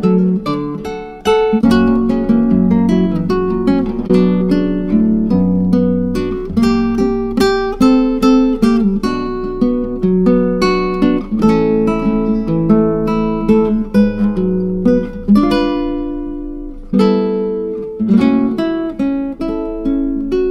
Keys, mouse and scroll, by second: 0.0-0.4 scroll up 3, 0.5-2.0 drag, 2.0-2.4 scroll up 4, 2.4 click, 3.1-4.2 scroll up 4, 4.2 scroll up 1, 4.4-13.6 drag, 13.6-16.2 scroll down 2, 16.2-16.7 scroll down 1, 16.7-20.5 drag.